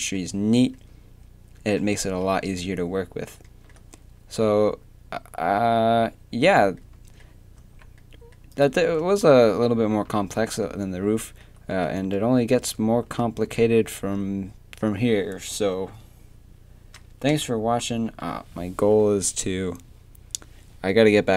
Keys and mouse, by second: 7.6 a, 8.8 Tab, 9.5 a, 9.9 a, 11.9 Tab, 12.6 Tab, 13.0 a, 13.6 a, 17.3 Tab, 17.9 a.